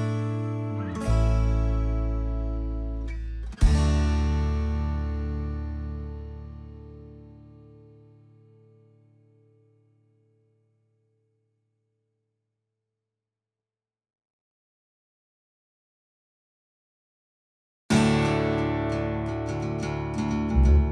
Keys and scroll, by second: 1.5 space, 9.7 l, 11.7 space, 13.4 p, 17.0-17.6 typing, 18.8 ctrl+z, 19.2 space.